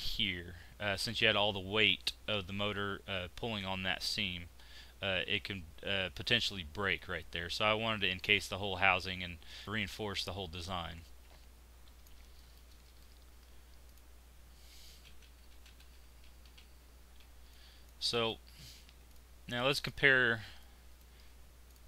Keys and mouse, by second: 9.4-11.0 middle drag, 12.3-13.8 middle drag, 13.8 click, 14.9-15.7 ctrl+z, 15.9 ctrl+z, 16.1 ctrl+z, 16.5 ctrl+z.